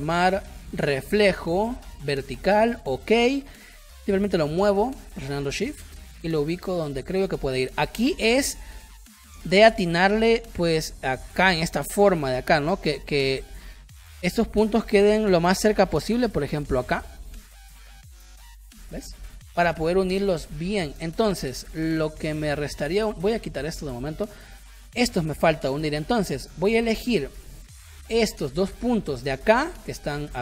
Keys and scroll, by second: 13.7 space, 17.8 space, 18.6 space, 25.2 a, 27.6 ctrl+y.